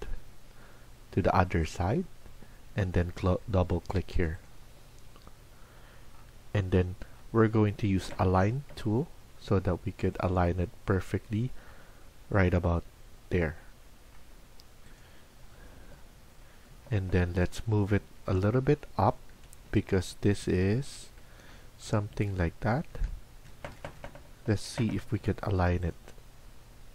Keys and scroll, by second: 3.3 Escape, 3.6 Escape, 7.9-8.6 typing, 23.7 Down, 23.7 Up, 23.7 Escape, 23.8 Escape, 24.6 typing.